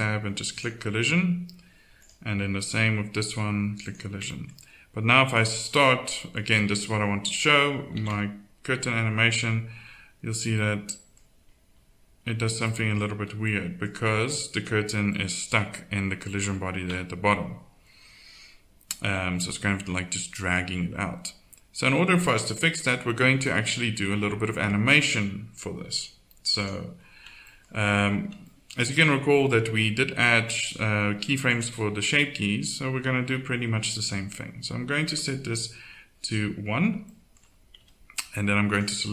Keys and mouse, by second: 0.2-1.9 drag, 3.0 click, 3.8 middle click, 4.0 click, 4.3 middle click, 5.4 right click, 7.9 alt+a, 13.2 z, 16.9 KP_1, 26.6-28.1 drag, 30.4-37.6 drag, 37.8 z.